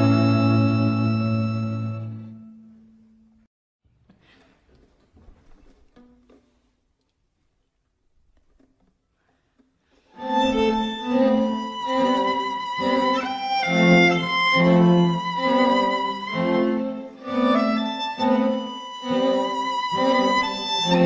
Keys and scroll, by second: 20.7 t.